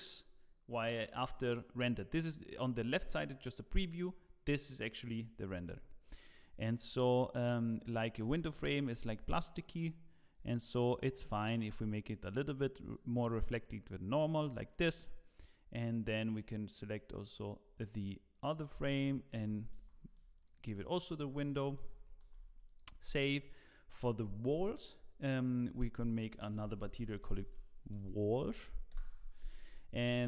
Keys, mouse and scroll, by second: 6.5 click, 16.2 click, 20.5 click, 21.2 scroll down 1, 21.6 shift+middle click, 22.3 ctrl+s, 22.6 click, 25.7 click, 27.4 click, 27.4 t, 29.8 l.